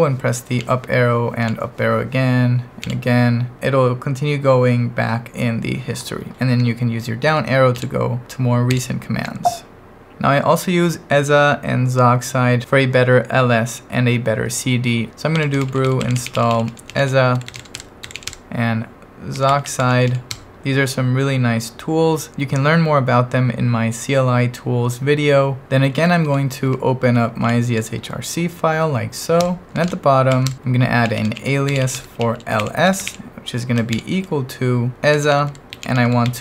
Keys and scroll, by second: 0.6 Up, 1.4 Up, 2.8 Up, 7.3 Down, 7.8 Down, 8.7 Down, 10.1 Return, 15.1-20.5 typing, 26.0 n, 26.2 i, 27.1 Up, 27.6 Up, 29.4 Return, 29.8-36.4 typing, 30.5 Return.